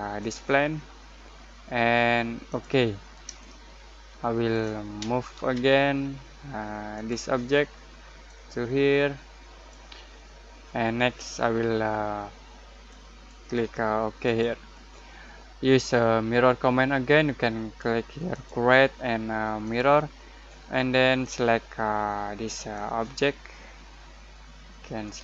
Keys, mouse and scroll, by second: 1.4 click, 2.4 click, 3.3-5.3 shift+middle drag, 5.3 m, 6.9-12.7 drag, 12.8-14.2 drag, 18.3 click, 22.7-25.2 drag.